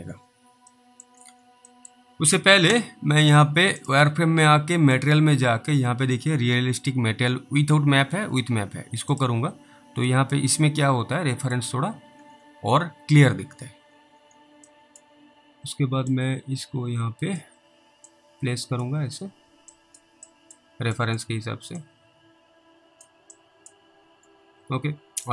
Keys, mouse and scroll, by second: 0.2 scroll down 1, 1.0 middle click, 1.1 scroll down 1, 1.8 middle click, 3.8 click, 9.1 click, 10.4 middle click, 12.2 scroll down 2, 12.9-13.3 scroll up 1, 13.4 scroll down 1, 13.9 scroll up 2, 15.0 middle click, 16.4 click, 18.4 click, 20.1 click, 20.6 click, 21.3 click, 22.1 click, 23.7 click, 24.7 alt+w, 25.1 scroll down 1.